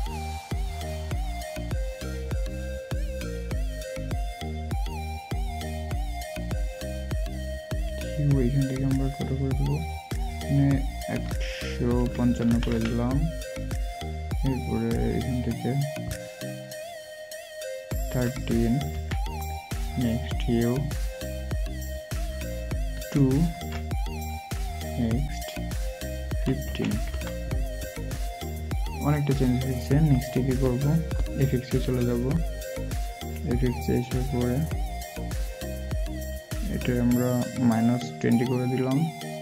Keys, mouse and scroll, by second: 2.8 typing, 11.9-12.4 typing, 26.6 typing, 30.8 typing.